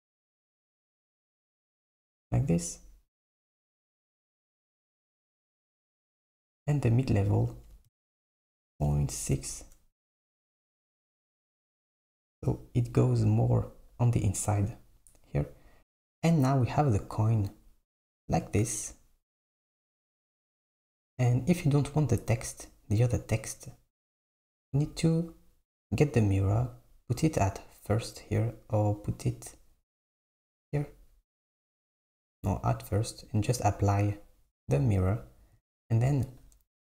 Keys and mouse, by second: 7.5-10.5 drag, 10.7 click, 25.8-26.8 drag, 28.8-30.3 drag, 32.2 click, 33.4-35.1 drag, 36.3 click.